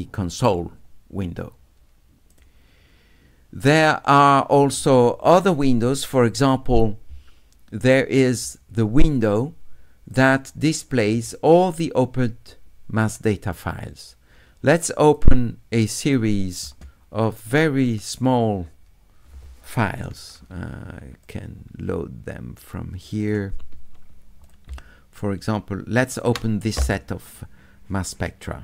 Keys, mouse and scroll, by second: 2.3 click, 10.1 click, 11.7-13.1 drag, 15.1 click, 16.0 click, 17.9 click, 21.2 click, 23.0 click, 23.2 click, 24.4 click, 26.1 shift+click.